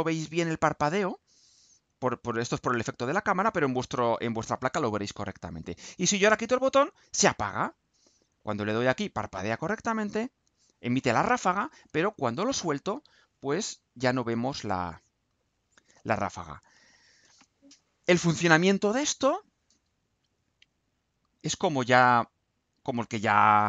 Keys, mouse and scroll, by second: 20.8 click, 22.6 click, 23.1-23.6 scroll down 1.